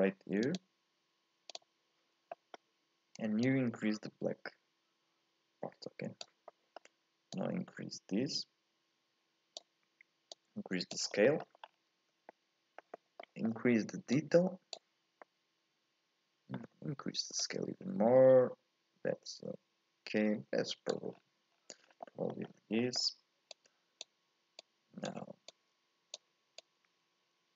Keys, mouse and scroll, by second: 1.6-2.2 scroll down 1, 2.2 scroll up 1, 2.3-3.4 middle drag, 3.4-6.4 drag, 6.5 middle click, 7.3-11.2 drag, 11.2 middle click, 11.6-12.3 scroll up 1, 12.3-14.1 middle drag, 14.1-15.2 drag, 15.2-17.4 middle drag, 17.4-20.5 drag, 21.1-22.0 scroll down 10, 22.0 middle click, 22.4-22.8 scroll up 4, 22.8 middle click, 23.5 click, 24.6 click, 25.5 click, 26.6 click.